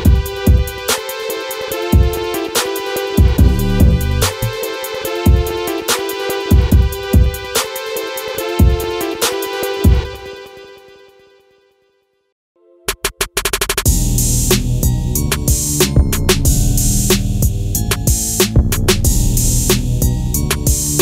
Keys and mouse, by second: 0.7 KP_1, 0.9 KP_3, 5.4 middle click, 6.6 KP_3, 7.4 e, 10.5 click, 10.8 middle click, 11.8 KP_1, 13.3 click, 19.1 click, 20.6 ctrl+a.